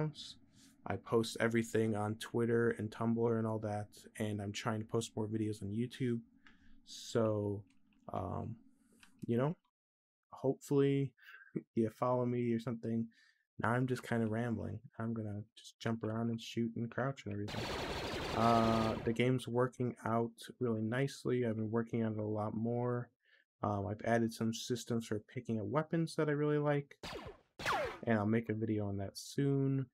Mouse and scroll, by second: 17.2-18.6 drag, 26.8 click, 27.4 click.